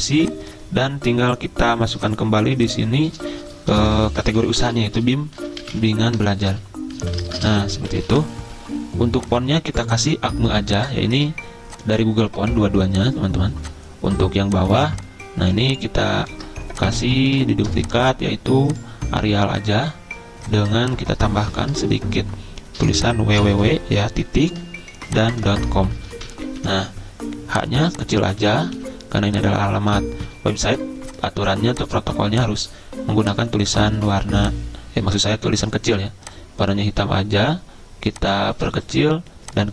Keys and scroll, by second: 3.7 Caps_Lock, 4.2-8.5 typing, 17.3 ctrl+a, 23.4-27.2 typing, 28.2-30.3 typing.